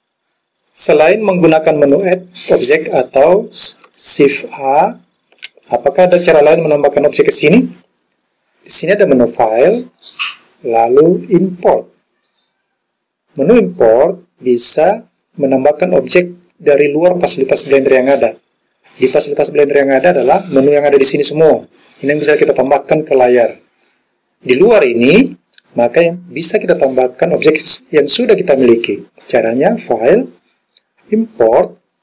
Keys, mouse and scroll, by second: 1.9 click, 4.7 shift+a, 9.4-17.5 drag, 19.9-26.8 drag, 29.5-32.0 drag.